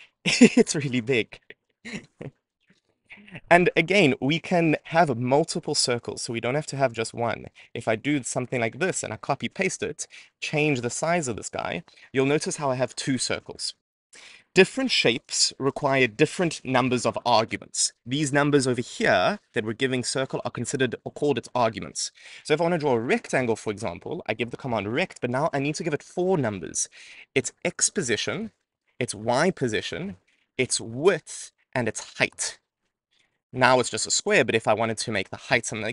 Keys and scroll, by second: 5.7 super+c, 6.8 Return, 7.1 super+v.